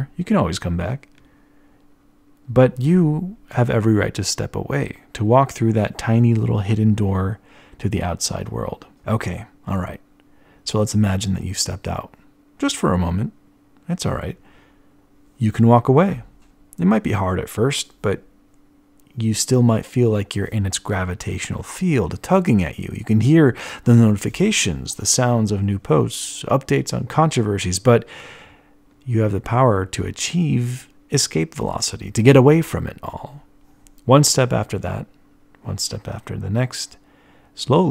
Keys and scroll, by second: 37.8 t.